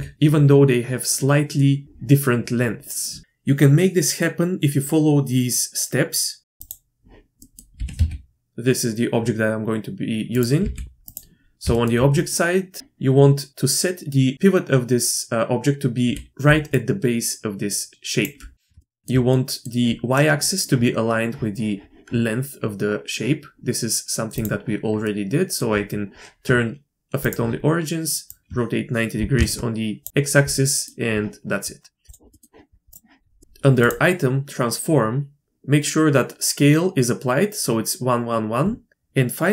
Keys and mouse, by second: 0.1 d, 6.4 shift+middle click, 6.6 Tab, 6.6-7.1 drag, 7.4 click, 7.7 g, 10.6 g, 11.7 shift+middle drag, 16.0 d, 16.4 d, 16.7-18.2 drag, 18.2 d, 18.7 shift+d, 18.8 shift+drag, 19.3 click, 24.3-24.8 drag, 25.0-25.6 drag, 27.2 click, 28.3-30.9 drag, 32.1 click.